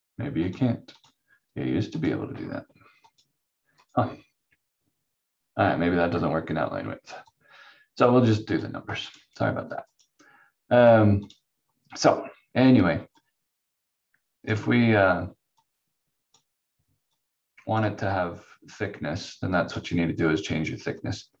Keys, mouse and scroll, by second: 0.5 click, 7.3 click.